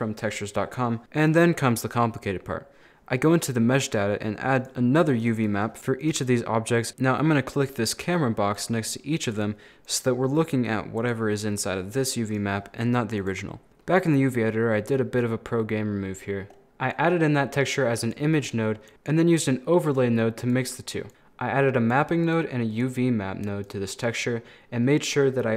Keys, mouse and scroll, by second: 1.3 click, 4.6 click, 5.2 click, 5.4 click, 5.8 o, 6.0 right click, 6.9 o, 7.7 click, 8.6 right click, 9.3 click, 9.9 right click, 11.0 click, 12.3 right click, 13.2 click, 13.7 middle click, 14.4 scroll down 1, 14.5-16.5 middle drag, 16.5 scroll up 2, 16.9 click, 18.5-18.9 scroll up 2, 18.9 click, 21.1 scroll up 2, 21.2-22.4 drag, 23.7 click.